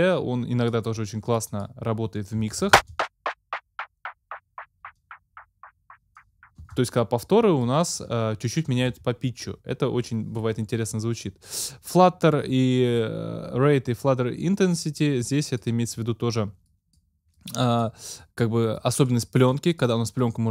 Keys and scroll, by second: 2.8 space, 6.7 space.